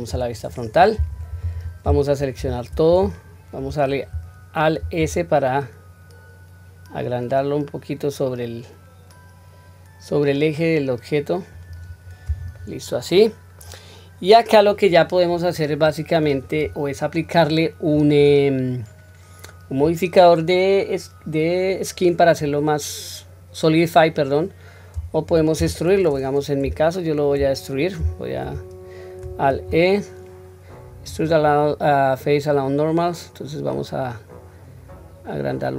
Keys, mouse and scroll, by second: 0.0 KP_1, 2.3 a, 4.7 alt+s, 12.5-13.6 middle drag, 14.6 scroll down 1, 15.2-16.1 middle drag, 15.2 scroll down 2, 16.5-17.8 scroll up 1, 17.9 scroll up 2, 18.1 scroll down 1, 21.8 middle click, 25.5 KP_1, 26.7-27.3 shift+middle drag, 29.4 alt+e.